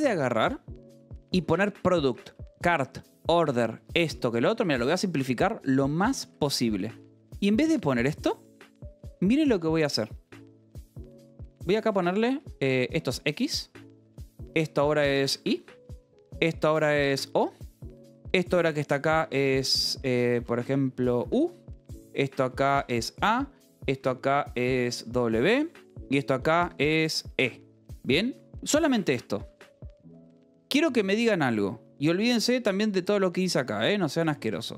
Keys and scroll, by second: 1.0-2.2 typing, 2.0 Escape, 3.7-6.2 typing, 7.2 l, 9.9-19.2 typing, 13.4 Escape, 17.0 Escape, 19.5 Escape, 20.3-29.9 typing, 24.7 Escape, 27.0 Escape, 31.5 l, 33.3 v, 34.2 c, 34.4 Escape.